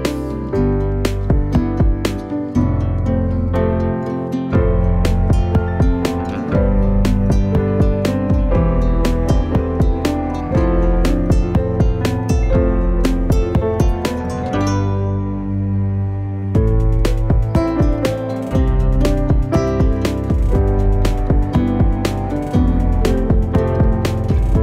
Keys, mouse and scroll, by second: 0.7 scroll down 1, 1.0 middle click, 1.9 s, 3.0 scroll down 1, 3.1 middle click, 3.5-4.6 scroll up 2, 3.7 click, 4.6 click, 4.9-5.5 scroll down 4, 5.5-7.0 shift+middle drag, 7.9-8.7 scroll up 2, 8.7 middle click, 9.3 click, 9.5 Tab, 9.8-10.2 scroll up 2, 10.2 click, 10.8 alt+s, 12.0 scroll down 1, 12.3 middle click, 12.8 scroll down 1, 13.1 shift+middle click, 13.4-13.7 scroll up 4, 13.7 shift+middle click, 14.3 Tab, 14.5 click, 14.7 middle click, 14.8-15.6 scroll up 4, 16.0 scroll up 1, 16.2 click, 17.0-17.5 scroll down 1, 17.5 ctrl+s, 20.3-20.9 scroll up 1, 20.9-21.6 scroll up 2, 21.6-23.1 scroll down 2, 23.9 shift+middle click, 24.2 scroll up 1, 24.4 click.